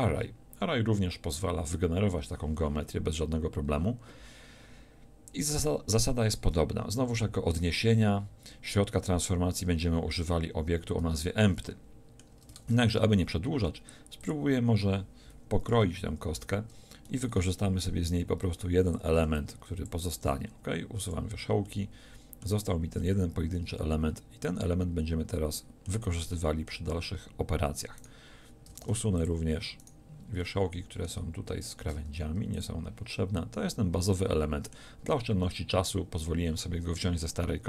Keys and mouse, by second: 11.0 Tab, 12.6 ctrl+Tab, 15.8 KP_1, 17.1 z, 18.2 b, 19.3 b, 20.2 x, 22.6 z, 28.8 ctrl+Tab, 32.1 x, 35.2-37.6 middle drag.